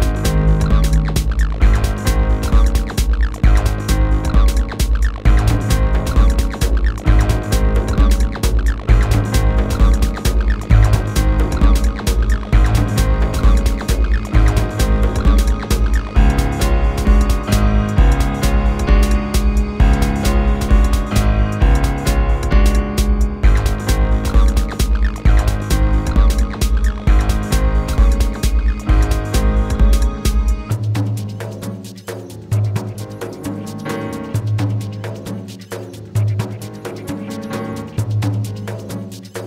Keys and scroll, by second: 7.9 ctrl+z, 9.5 3.